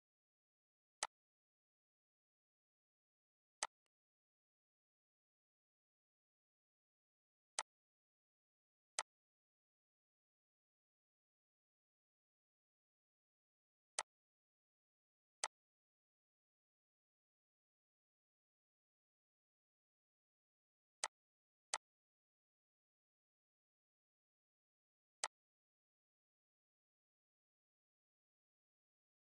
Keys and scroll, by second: 10.9 ctrl+d, 14.0 ctrl+d, 25.7 Delete.